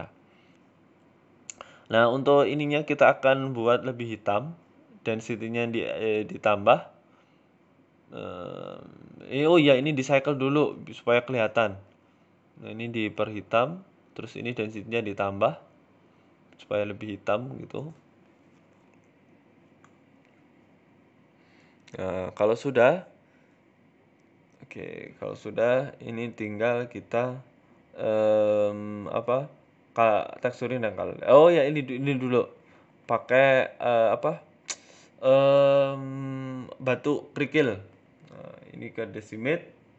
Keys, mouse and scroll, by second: 18.4 click, 18.7 shift+middle click, 19.1 z, 19.4 z, 20.1 shift+middle click, 20.5 middle click, 20.5 scroll down 4, 22.1-22.8 scroll up 7, 22.5 shift+middle click, 22.8 middle click, 23.2 scroll up 1, 23.4-24.4 scroll down 6, 23.7 middle click, 26.8 alt+h, 27.2 middle click, 27.4 scroll up 3, 27.6 middle click, 28.2 shift+middle click, 28.7 scroll down 5, 28.8 shift+a, 32.3 middle click, 32.6-33.1 scroll down 5, 33.1 ctrl+z, 33.3 shift+a, 34.0 shift+s, 34.7 shift+a, 36.0-36.4 scroll up 6, 37.0 click, 37.4 click, 38.8 click.